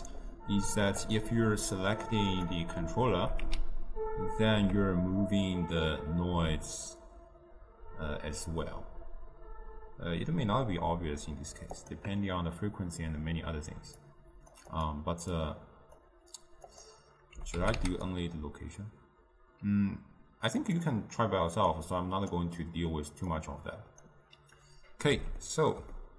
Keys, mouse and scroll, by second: 3.6 g, 14.2-17.1 drag, 17.7 g, 21.9-25.6 drag, 25.6-26.1 ctrl+middle drag.